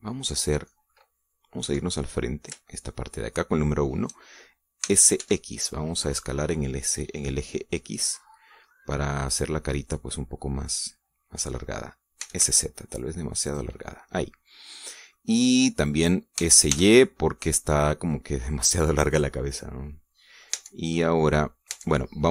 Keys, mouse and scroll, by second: 0.0-0.3 scroll up 1, 0.3-1.7 middle drag, 2.3 KP_1, 3.4-4.8 shift+middle drag, 5.5 s, 5.9 x, 8.7 click, 9.4-12.4 middle drag, 12.9 s, 14.2-15.4 drag, 14.5-15.4 middle drag, 15.8-16.8 middle drag, 17.1 s, 17.4 y, 19.8 click, 20.2-21.3 middle drag, 21.3 Tab, 21.3 click, 21.7 middle click.